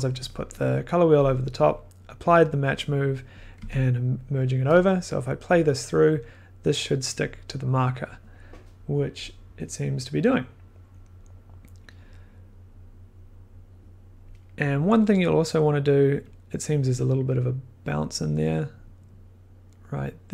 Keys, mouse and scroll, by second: 0.8 click, 3.6 1, 4.1-5.2 drag, 8.7-10.6 drag, 16.3 click, 16.8 click.